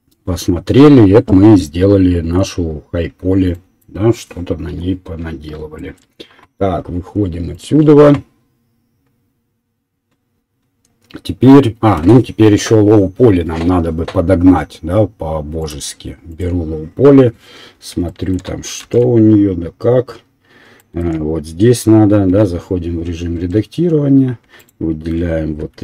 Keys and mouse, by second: 9.5 click, 9.5-19.3 right drag, 15.6 click, 16.3 click, 16.3 middle click, 19.7 shift+z, 23.4 Tab, 23.4-24.7 right drag, 24.7-25.8 alt+middle drag, 25.6 3.